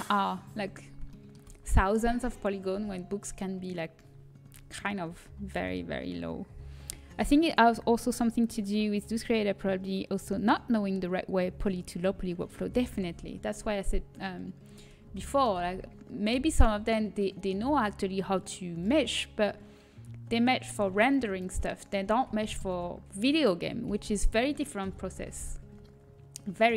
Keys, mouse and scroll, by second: 3.0 a, 13.3-15.6 middle drag, 15.6 z, 17.0 z, 17.4-18.7 middle drag, 19.1-21.0 drag, 21.0 z, 24.8 l, 24.8 KP_1.